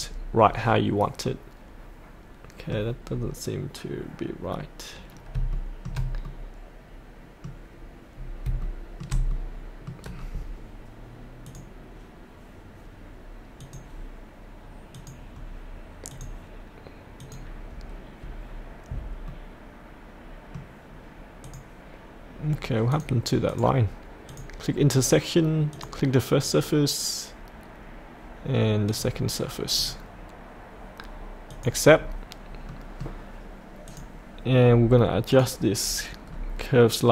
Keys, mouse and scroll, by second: 1.2-3.0 middle drag, 5.5 shift+middle click, 6.2-8.1 middle drag, 8.6 shift+middle click, 9.3 middle click, 11.4 click, 18.0-19.2 scroll up 1, 19.2-21.3 middle drag, 21.4 click, 31.9-32.7 scroll up 1, 32.7 middle click, 33.9 click, 35.8-36.2 scroll up 1.